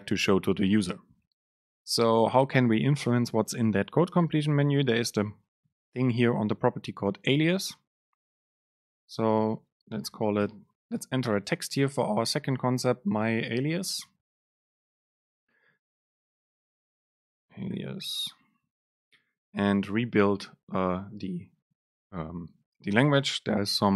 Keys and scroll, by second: 11.1 BackSpace, 16.9 BackSpace, 19.6 BackSpace, 19.8 ctrl+shift+super+F9.